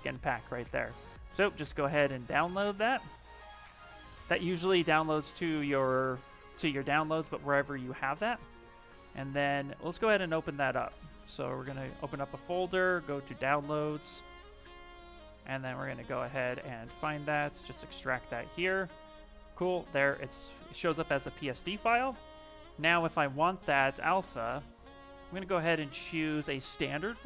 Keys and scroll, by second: 25.1-26.4 typing.